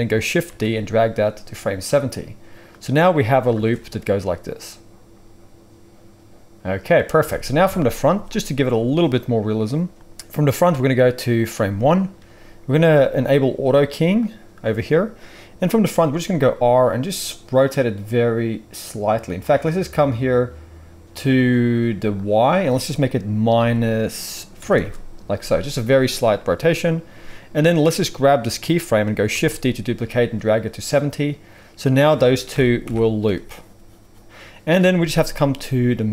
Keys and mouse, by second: 0.4 shift+d, 2.0-2.6 middle drag, 2.6-14.3 drag, 3.5 space, 7.1 space, 7.6 KP_1, 14.3-22.1 middle drag, 16.3 r, 22.1-31.0 drag, 29.3 shift+d, 31.0-35.5 middle drag, 32.7 shift+Right, 32.8 shift+Left, 35.5-36.1 drag.